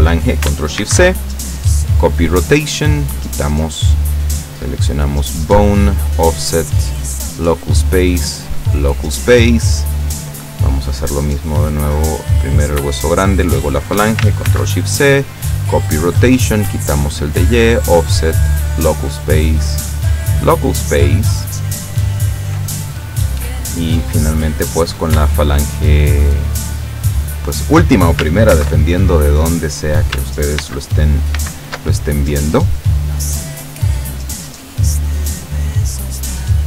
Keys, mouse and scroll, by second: 0.9 ctrl+shift+c, 1.9 click, 3.5 click, 4.5 click, 5.0 click, 5.9 click, 6.4 click, 7.2 click, 7.7 click, 8.7 click, 10.5 right click, 12.3 right click, 13.4 shift+right click, 14.6 ctrl+shift+c, 15.4 click, 16.6 click, 17.4 click, 17.9 click, 18.8 click, 19.5 click, 20.4 click, 23.5 right click, 24.4 right click, 25.7 shift+right click, 28.6 ctrl+shift+c, 30.7 ctrl+shift+c, 31.4 ctrl+shift+c, 32.3 ctrl+click, 33.3 click, 34.3 click, 34.8 click, 35.6 click, 36.1 click.